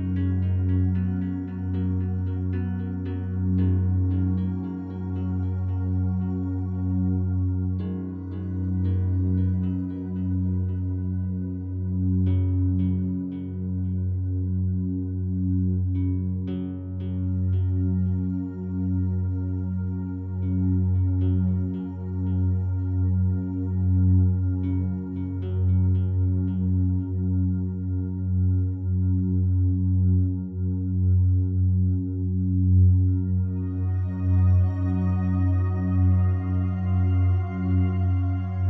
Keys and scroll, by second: 28.3 c, 29.3 c, 38.5 ctrl+r.